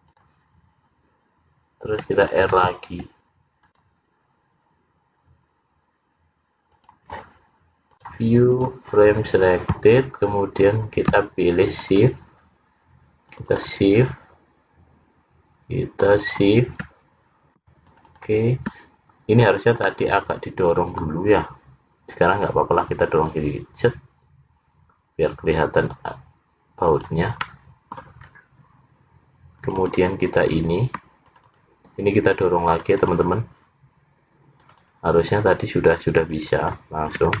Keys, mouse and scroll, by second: 0.6-1.1 scroll down 3, 2.6 ctrl+r, 8.0 click, 9.5-10.5 scroll down 9, 11.8 shift+click, 12.2 shift+click, 13.3 shift+click, 13.9 shift+click, 16.1 shift+click, 16.4 shift+click, 17.0-17.5 scroll down 1, 17.9 shift+click, 18.3 shift+click, 19.1-20.0 scroll down 4, 20.0 middle click, 23.2 click, 27.6 middle click, 28.4 scroll up 4, 29.7 click, 30.6 click, 31.4 shift+click, 31.6 shift+click, 31.9 click, 32.9 click, 33.4 shift+click, 34.7 shift+click, 35.1 shift+click, 36.4 shift+click, 36.7 shift+click.